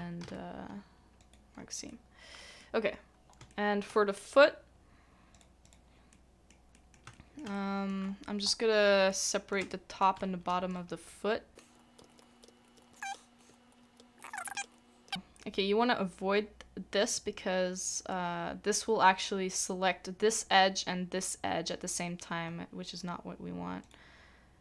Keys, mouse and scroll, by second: 0.2 ctrl+e, 1.9 middle click, 2.7 scroll down 1, 2.8-3.4 scroll up 1, 3.5 shift+middle click, 5.6 double click, 6.1 middle click, 7.1 shift+middle click, 7.5 shift+middle click, 8.0-8.4 scroll up 1, 8.4 scroll down 1, 8.4-9.0 scroll up 1, 9.0 scroll down 1, 9.1 middle click, 9.1-9.6 scroll up 1, 10.2 shift+middle click, 10.2 scroll down 1, 10.2 scroll up 1, 11.6 alt+click, 11.7 middle click, 12.1 alt+shift+click, 12.2 middle click, 12.6 alt+shift+click, 12.8 middle click, 13.0 scroll up 1, 13.5 alt+shift+middle click, 13.7 scroll up 1, 14.1 shift+click, 14.4 shift+click, 14.5 shift+middle click, 14.7 shift+click, 15.1 shift+middle click, 22.4 middle click, 23.8 shift+click.